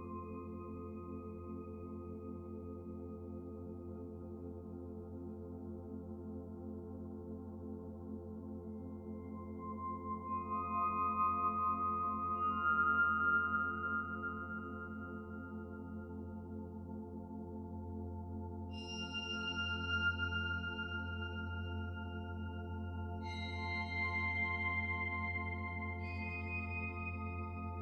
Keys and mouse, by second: 0.3 middle click, 0.6-1.0 middle drag, 1.2 shift+middle click, 1.7 ctrl+z, 1.8 ctrl+z, 2.2-2.9 middle drag, 3.5 shift+middle click, 3.8-4.3 middle drag, 4.5 ctrl+s, 4.9 middle click, 5.5-5.9 shift+middle drag, 15.1-16.3 middle drag, 19.7-23.8 middle drag, 24.3 click.